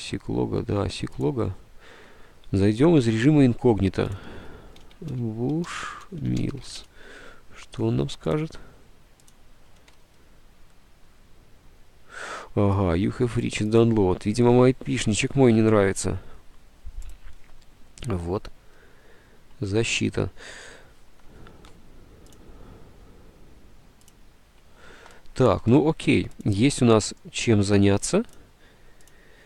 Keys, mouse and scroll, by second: 4.9-7.6 typing, 9.0-9.7 typing.